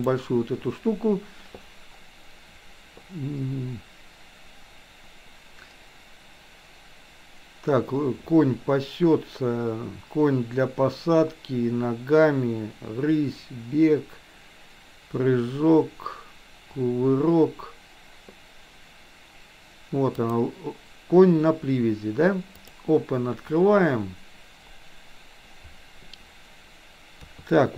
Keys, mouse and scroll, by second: 27.2 KP_3.